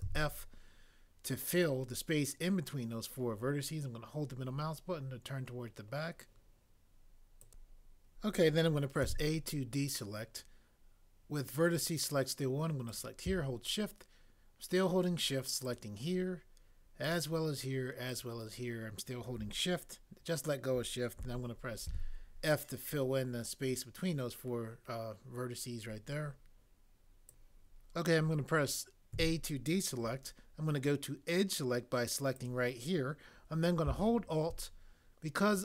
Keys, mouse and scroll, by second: 0.0 f, 9.0 a, 21.8 f, 29.2 a.